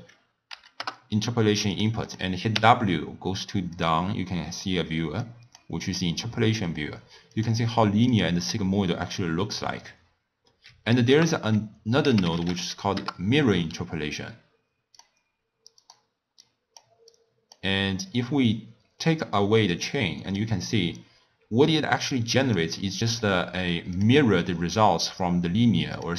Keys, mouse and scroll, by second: 2.0 click, 2.5 w, 5.2 click, 7.3-10.3 drag, 11.1 ctrl+a, 12.3 r, 16.4 click, 17.1 click, 18.1 click, 19.7-24.0 drag, 26.0-26.1 drag.